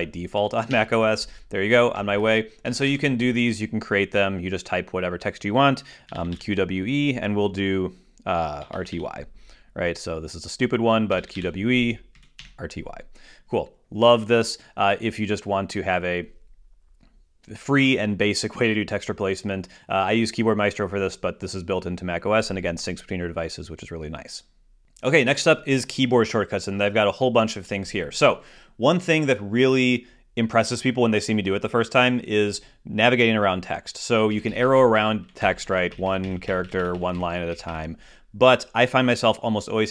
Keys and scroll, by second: 0.0 super+o, 2.8 shift+super+Left, 3.4 shift+super+BackSpace, 3.6 super+Tab.